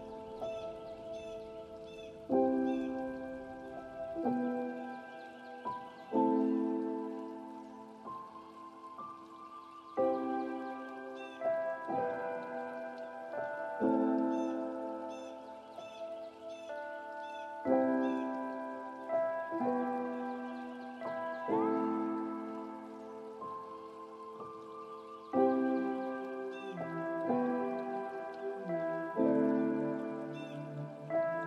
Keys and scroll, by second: 3.2 ctrl+space.